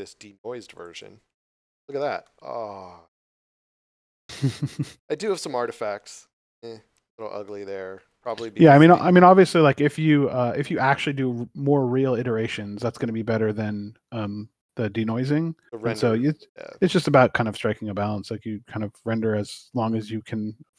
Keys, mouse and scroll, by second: 2.2 middle click, 4.7 shift+middle click, 7.4 middle click, 8.9 shift+middle click, 11.1 scroll down 1, 11.6 shift+middle click, 12.2 middle click, 18.0 shift+middle click.